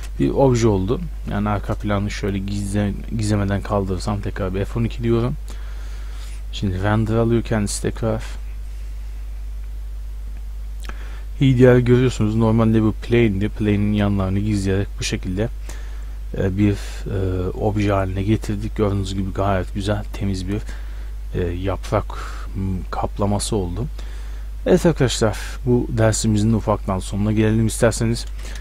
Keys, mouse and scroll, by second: 0.0 shift+space, 2.2-4.2 drag, 4.2 F12, 14.6-24.1 middle drag, 25.8-28.6 middle drag.